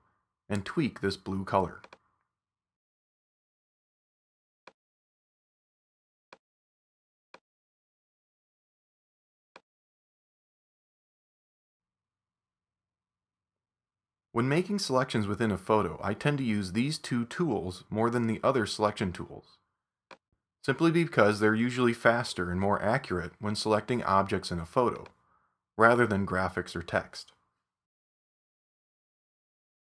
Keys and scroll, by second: 13.0 super+d, 14.6 super+=.